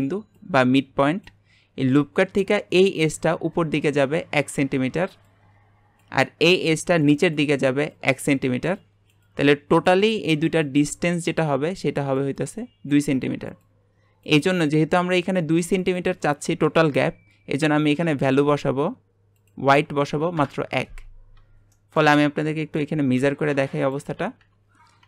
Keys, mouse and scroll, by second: 19.4-21.7 drag, 21.7 shift+middle click, 22.1 Tab, 23.8 click, 24.0 Delete, 24.4 Delete.